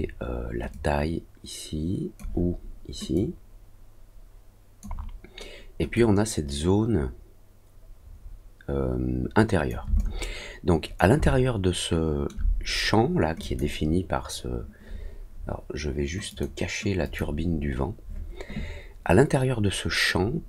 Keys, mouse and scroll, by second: 0.7-2.1 drag, 3.1-4.8 drag, 5.9-9.6 drag, 9.9 alt+click, 11.1-12.2 alt+middle drag, 13.4 click, 16.2 click, 17.0 click.